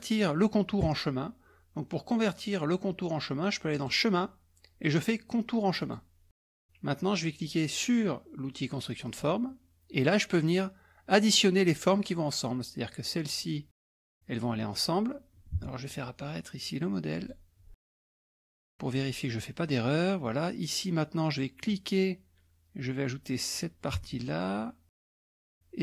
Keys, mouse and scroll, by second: 3.7 click, 5.8 click, 9.1 click, 12.9-14.7 drag, 15.6 alt+Tab, 17.2 alt+click, 18.0 click, 21.7-23.9 drag, 23.9 alt+Tab, 25.1 alt+Tab, 25.5-25.8 drag.